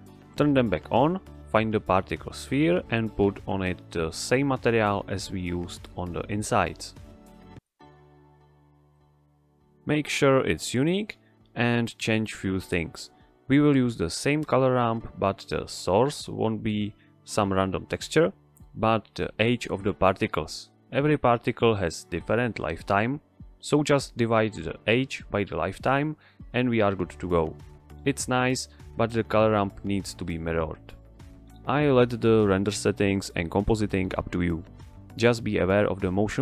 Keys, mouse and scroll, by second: 1.1 click, 3.9 click, 5.2-5.8 scroll down 1, 5.8 click, 9.4 click, 11.9 click, 12.9 x, 13.8-14.8 middle drag, 15.3 shift+a, 17.4 click, 18.7 shift+a, 21.4-23.8 drag, 35.2 click.